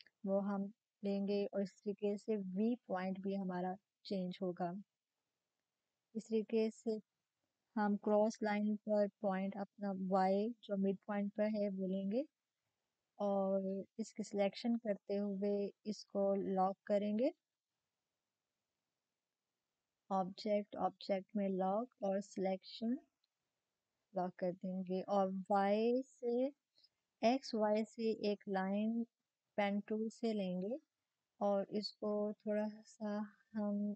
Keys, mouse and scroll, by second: 6.1-7.8 drag, 6.8-7.8 typing, 10.8-16.7 drag, 14.5 typing, 17.0 click, 17.0 typing, 23.3 click, 23.5 click, 23.5 typing, 31.0 click, 31.0 typing, 31.0-33.9 drag.